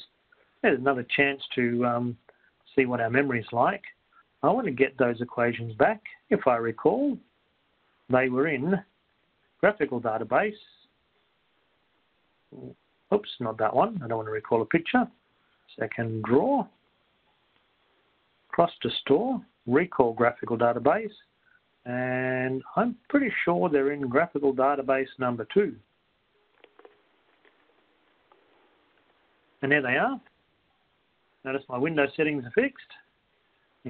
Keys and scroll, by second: 2.2 Return, 2.2 1, 9.2 Right, 9.5-10.2 typing, 12.7 2, 13.0 2, 16.0 Right, 16.0 2, 18.7 Right, 20.7 4, 26.9-27.7 typing, 28.9-29.7 typing.